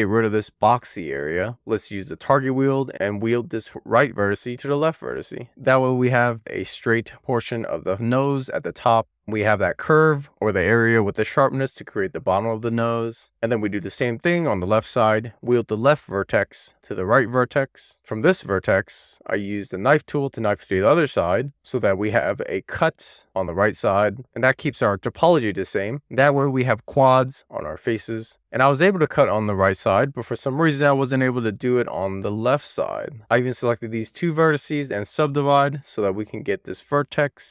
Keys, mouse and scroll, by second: 1.5 Tab, 2.1 alt+q, 3.3 Tab, 4.1 click, 6.4 click, 7.4 click, 11.9 click, 12.8 click, 13.2 scroll down 1, 13.4 middle click, 13.6 shift+middle click, 13.9 middle click, 14.3 click, 14.6 click, 14.8 middle click, 15.9 click, 16.2 click, 16.4 middle click, 16.7 click, 17.3-23.6 middle drag, 18.0 k, 24.4 super+z, 25.4 k, 28.3 middle click, 28.7 click, 29.0 k, 29.8 middle click, 30.1 k, 30.9 click, 31.0 middle click, 31.3 super+z, 31.7 middle click, 32.0 k, 33.3 click, 34.8 right click, 35.7 click, 36.2 click.